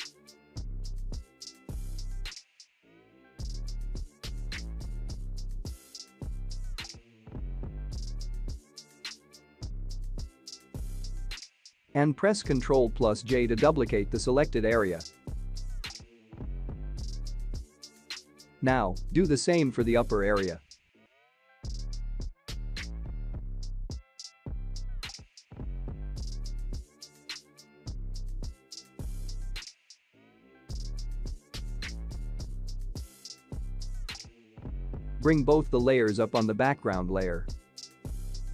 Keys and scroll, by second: 12.4 ctrl+j, 27.3 ctrl+j.